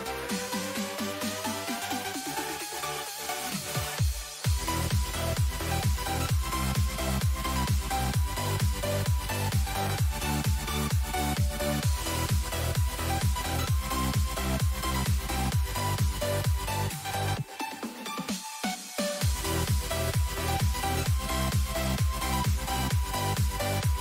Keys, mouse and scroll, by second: 12.6 n, 14.0 a, 14.3 a, 16.9 z, 18.1 Delete, 21.3-24.0 drag.